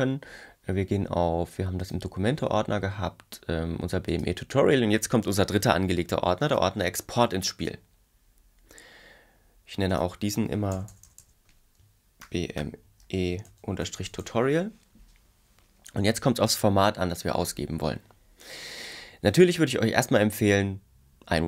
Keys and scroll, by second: 10.7 Left, 12.0-14.0 typing.